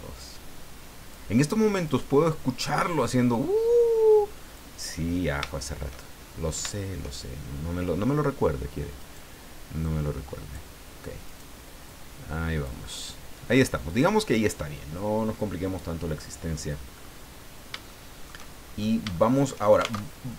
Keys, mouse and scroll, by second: 1.8 right click, 3.3-4.7 drag, 5.0 scroll down 2, 9.0 right click, 9.8 click, 11.2 right click, 11.6 middle click, 11.8 click, 13.1-13.4 scroll down 2, 13.5 scroll up 2, 13.9 scroll down 2, 16.9-17.3 scroll up 2, 17.8 shift+middle click, 18.8 shift+scroll up 3, 19.1 shift+middle click, 19.9 alt+shift+Tab.